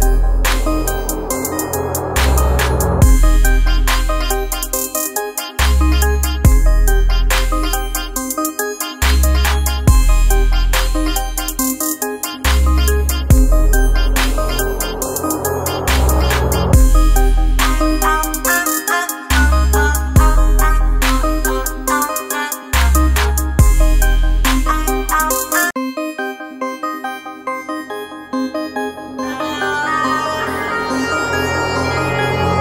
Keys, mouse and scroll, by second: 14.7 click, 18.4 shift+click, 26.5 click, 29.0 shift+click.